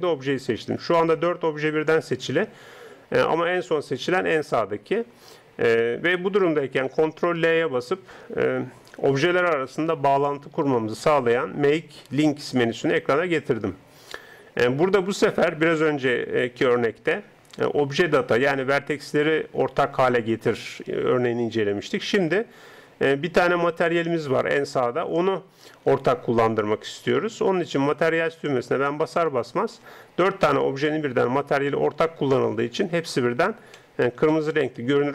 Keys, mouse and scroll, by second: 7.4 ctrl+l, 29.2-35.1 middle drag.